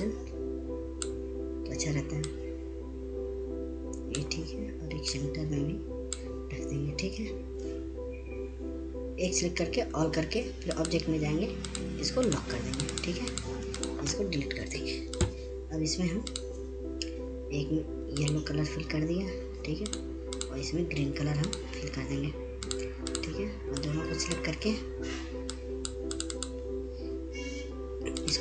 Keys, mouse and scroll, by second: 11.2 ctrl+a, 12.0 click, 15.9 Delete, 16.4 click, 19.6-28.4 drag.